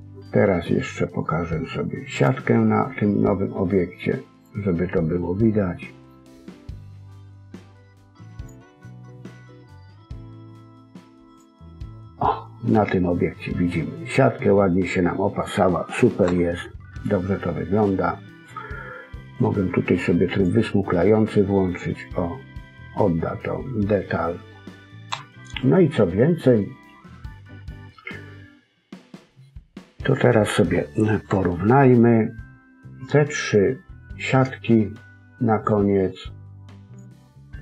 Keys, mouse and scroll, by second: 2.1 click, 5.0 middle click, 8.3 click, 11.2 click, 11.8 middle click, 16.2 KP_1, 19.2 right click, 21.2 middle click, 25.0 KP_1, 29.3 middle click, 31.2 KP_1, 35.5 click, 36.8 click.